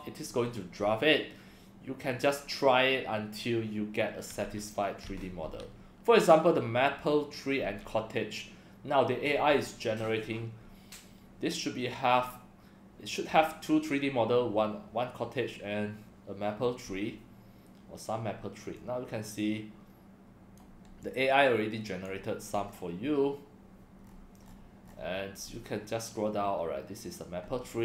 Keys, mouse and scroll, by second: 18.8-20.5 drag, 21.0-22.1 drag, 22.5 scroll down 1, 24.0-24.9 scroll down 5, 25.4 scroll down 1, 27.4 scroll up 1.